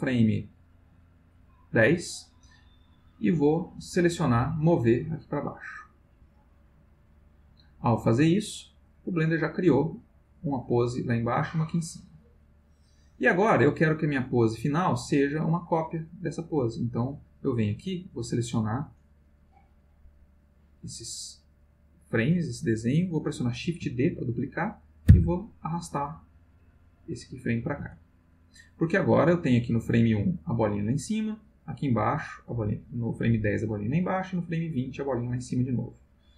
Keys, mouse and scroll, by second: 3.7 click, 5.2-7.4 drag, 9.3-14.6 drag, 17.1 click, 18.1-19.1 drag, 19.7-20.6 drag, 25.1 shift+d, 27.8 space, 29.3-36.1 drag.